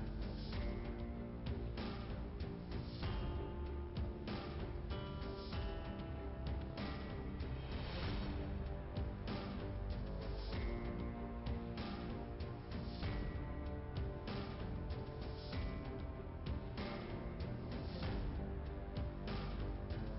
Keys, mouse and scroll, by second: 1.6 click, 2.3 0, 2.4 Return, 4.4 click, 12.4 click, 12.6 click, 15.5 click, 15.8 click, 16.1 click, 18.2 click, 19.9 click.